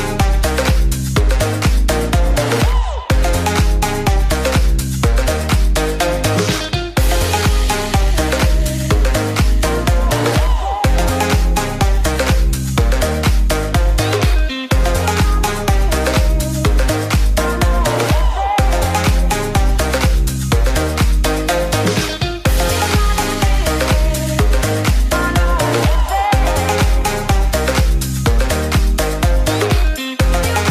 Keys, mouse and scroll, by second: 2.5-12.2 drag.